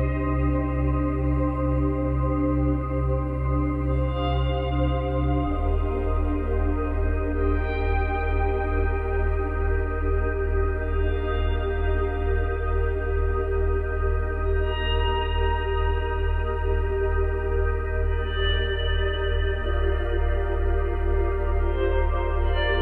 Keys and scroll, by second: 18.3 space, 22.7 space.